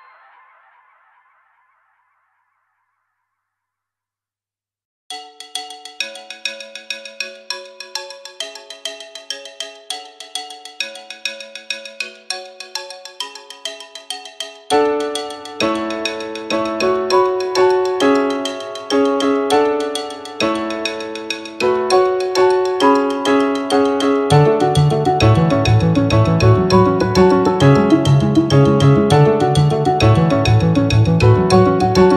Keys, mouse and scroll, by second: 0.9 g, 1.3 z, 5.2 click, 7.3 click, 8.4 g, 8.7 z, 10.3 click, 10.6 Tab, 11.9 Tab, 14.0 click, 16.7 click, 17.2-17.6 scroll down 2, 18.4-19.7 scroll down 8, 21.1 click, 22.1-23.4 scroll down 2, 23.4 click, 23.7 click, 24.6 click, 24.9 click, 25.5 click, 26.4 click, 26.9 click, 28.8 click, 29.4 middle click, 30.3 shift+middle click, 30.8-31.3 scroll up 2, 31.5 shift+middle click.